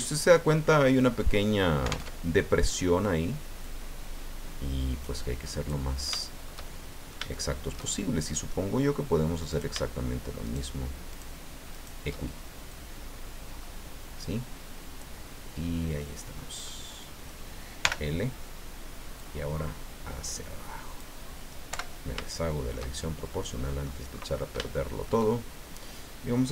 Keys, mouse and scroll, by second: 2.1 alt+Tab, 3.6 click, 4.1-4.7 scroll down 4, 6.2-8.7 shift+middle drag, 9.5 shift+right click, 10.5 shift+right click, 11.1 shift+right click, 11.7 shift+right click, 12.7 click, 13.5-13.9 scroll up 1, 15.2 scroll down 1, 15.6 middle click, 16.7 middle click, 17.8 l, 19.2-21.2 drag, 21.7 o, 22.2 shift+middle click, 23.0-24.0 shift+middle drag, 24.1 scroll up 1, 24.6 shift+middle click.